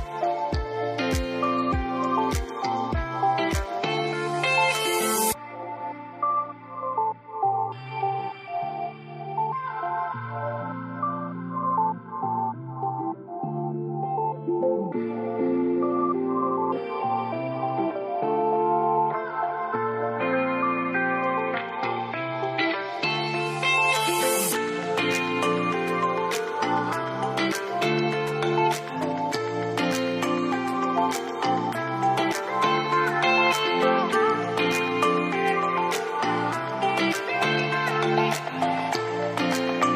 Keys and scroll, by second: 27.6 typing, 27.6 Return, 29.8-30.6 typing, 34.8-38.6 typing.